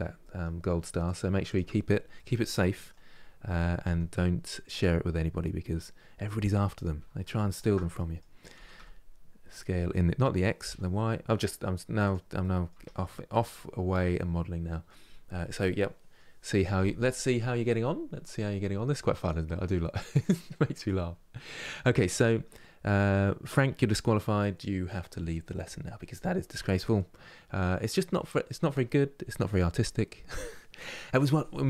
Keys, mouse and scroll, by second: 0.7-1.8 drag, 1.8-3.2 middle drag, 3.2 g, 4.8 middle click, 5.5-5.9 scroll up 2, 7.2 alt+click, 7.6 middle click, 8.3 s, 12.1 middle click, 12.4 Tab, 12.7 scroll down 2, 13.1-16.1 middle drag.